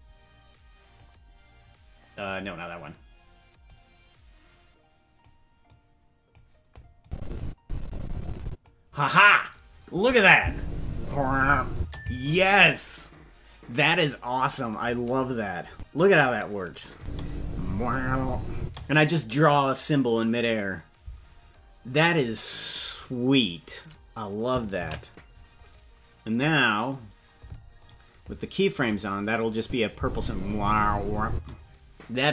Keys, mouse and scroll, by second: 2.2 click, 3.6-5.2 drag, 5.6 click, 7.0-8.6 drag, 10.0 click, 10.3 space, 11.7 space, 15.7 click, 16.9 space, 18.5 space, 27.0 ctrl+s, 28.0 click, 29.6 click, 29.9 space, 31.3 space.